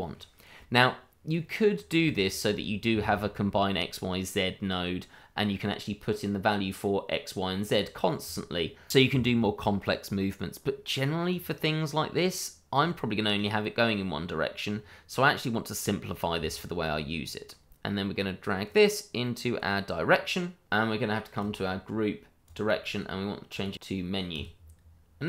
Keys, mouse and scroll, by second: 0.5-1.3 scroll down 1, 1.3 click, 2.1 shift+middle click, 2.2 middle click, 2.3 shift+middle click, 9.2 middle click, 11.3 click, 13.5 middle click, 16.4 shift+middle click, 16.4 middle click, 16.5 shift+middle click, 17.2-18.6 scroll up 1, 18.6 click, 21.4 click, 22.8-23.5 scroll down 1, 23.5 click.